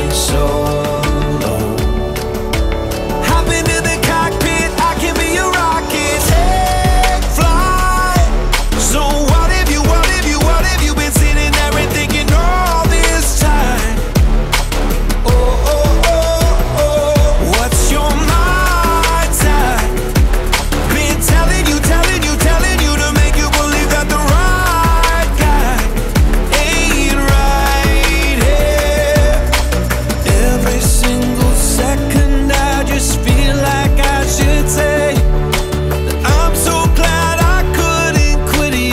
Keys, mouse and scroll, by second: 4.4-6.0 drag, 6.0-6.4 scroll up 7, 6.4 middle click, 7.2-8.8 drag, 8.8 KP_0, 10.9-13.8 drag, 13.8 scroll up 4, 14.0-14.8 middle drag, 14.8 click, 16.4 click, 16.8-18.2 middle drag, 20.1 middle click, 20.8 scroll down 3, 21.0 middle click, 21.8 shift+a, 25.7 scroll down 2, 26.2-26.7 middle drag, 26.7 click, 27.6 shift+a, 29.8 Down, 30.0 Down, 33.1-33.7 drag, 33.7 middle click, 34.3 click, 35.2 shift+a.